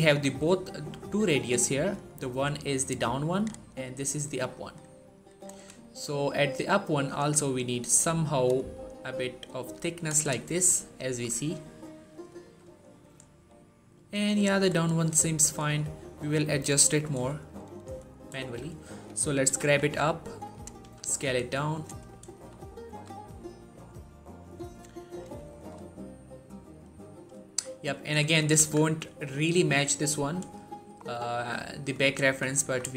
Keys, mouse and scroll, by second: 1.9-3.5 click, 3.2 right click, 4.2-5.5 click, 5.2 right click, 5.7 shift+middle click, 7.0-8.0 click, 7.7 right click, 8.4-9.9 drag, 10.2 shift+middle click, 10.4-11.7 shift+scroll up 1, 11.7-12.0 scroll down 1, 12.3 shift+middle click, 12.5-13.8 shift+scroll up 2, 14.7 shift+middle click, 17.6 click, 18.0 shift+middle click, 19.3 g, 19.6 z, 20.3 click, 20.6 s, 21.6 click, 21.8 scroll up 1, 22.2 shift+middle click, 22.4 shift+scroll up 2, 22.7 s, 24.9 click, 25.3 shift+middle click, 25.9-26.7 scroll down 1, 26.7-27.2 scroll up 1, 27.3 shift+middle click, 28.2 shift+middle click, 28.4 z, 29.1 shift+middle click, 30.2-30.8 scroll down 1, 30.8-31.3 scroll up 1, 31.5 shift+middle click, 32.1 z, 32.5 Tab, 32.8 shift+middle click.